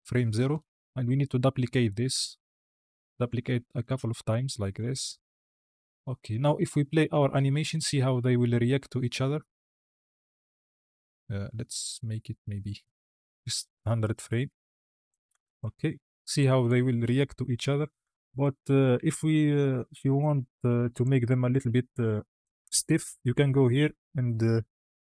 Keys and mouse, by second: 1.2-4.8 typing, 4.6 click, 5.6 Tab, 6.9 space, 10.1 space, 11.9-15.0 drag, 15.2 space, 17.9 space, 18.3-18.7 drag, 20.8 click, 22.2 click.